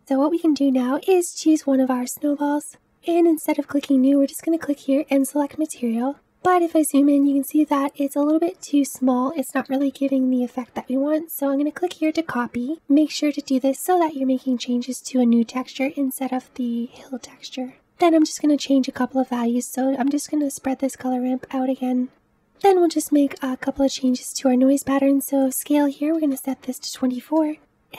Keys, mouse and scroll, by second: 0.0 click, 4.3-6.1 drag, 6.1-7.6 scroll up 8, 7.6-9.7 middle drag, 9.7 KP_Decimal, 10.5-11.5 scroll down 5, 12.3-22.2 drag, 22.2 ctrl+shift+z, 27.3-27.9 drag.